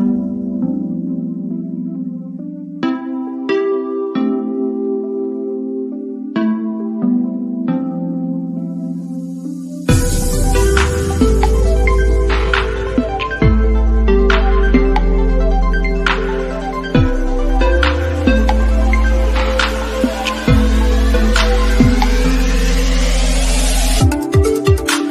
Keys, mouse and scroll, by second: 2.2 click, 6.1 click, 8.2 scroll up 1, 9.0 middle click, 10.0-16.1 drag, 17.0 click, 20.5 click, 20.6 shift+middle click, 21.9-23.8 shift+middle drag.